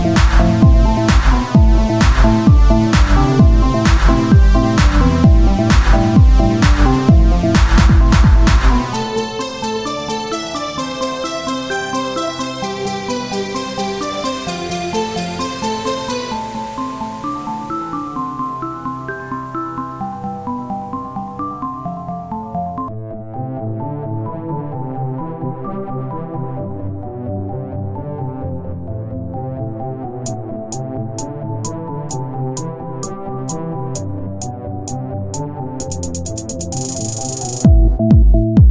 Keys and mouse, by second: 3.4-5.5 drag, 4.4 z, 5.5 Tab, 8.4 Tab, 8.9-10.8 drag, 9.1 shift+a, 13.2-14.5 drag, 15.7 click, 16.6 z, 21.1 KP_1, 21.5 z, 22.7 shift+d, 23.8 z, 24.1-26.0 drag, 27.3 click, 27.7 click, 28.2 click, 28.8 KP_1, 29.0 z, 29.7 z, 30.8 click, 32.5 click, 33.2 click, 33.4 KP_1, 33.7 z, 34.7 shift+d, 37.5-38.7 drag, 37.9 z.